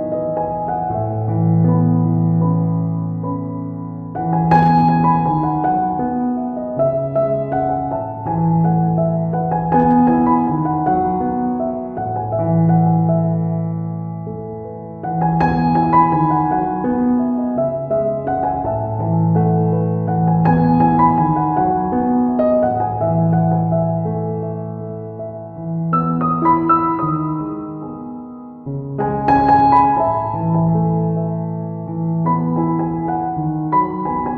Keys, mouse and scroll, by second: 0.4 click, 0.5 click, 1.2 ctrl+right click, 1.6 right click, 2.2 click, 3.1 click, 4.6 f, 4.8 click, 5.3 f, 5.6 click, 6.2 click, 8.2 click, 8.8 middle click, 9.5 right click, 9.8 click, 11.2 middle click, 11.9 middle click, 12.4 ctrl+middle click, 13.2 middle click, 14.3 right click, 14.8 middle click, 15.2 click, 15.7 right click, 16.3 ctrl+right click, 16.8 middle click, 17.1 middle click, 17.8 middle click, 18.1 ctrl+right click, 18.6 shift+right click, 19.2 middle click, 19.7 ctrl+middle click, 20.3 right click, 20.9 f, 21.2 click, 23.4 middle click, 24.2 right click, 24.6 ctrl+right click, 25.5 middle click, 26.2 right click, 26.5 ctrl+right click, 27.1 click, 29.0 click, 30.7 click, 31.1 click, 31.1 right click, 32.9 ctrl+right click, 33.3 click.